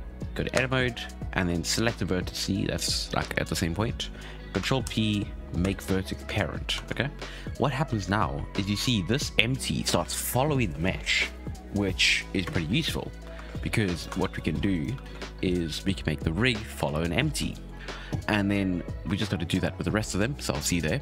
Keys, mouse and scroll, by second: 0.5 Tab, 1.3 1, 1.6 click, 4.8 ctrl+p, 6.3-6.7 scroll down 4, 6.7 ctrl+Tab, 7.9 space, 8.6 alt+a, 12.4 space, 13.5-13.9 shift+middle drag, 13.9 right click, 14.1 Tab, 14.5 1, 14.7 right click, 15.0 alt+a, 15.4 right click, 17.4 shift+middle drag, 17.6-18.7 scroll up 6, 18.7-21.0 scroll down 3.